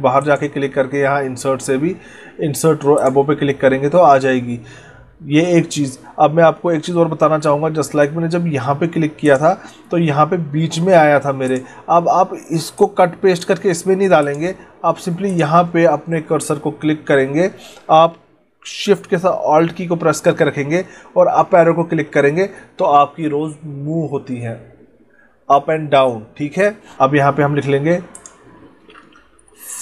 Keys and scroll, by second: 7.1 ctrl+z, 21.9 alt+shift+Up.